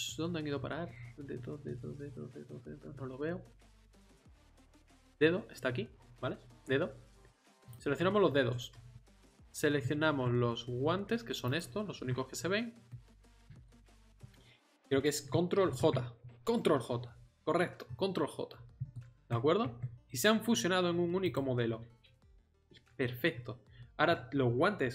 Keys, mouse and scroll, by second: 7.6-11.4 drag, 11.6-13.1 drag, 12.9-13.7 middle drag, 15.6 ctrl+j, 17.9 middle click, 19.6 Tab, 23.2 Tab.